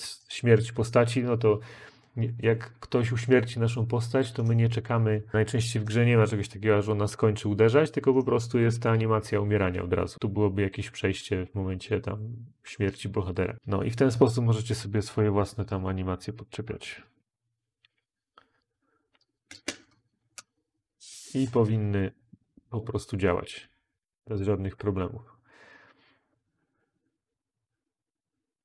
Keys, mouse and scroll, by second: 15.0-18.9 typing.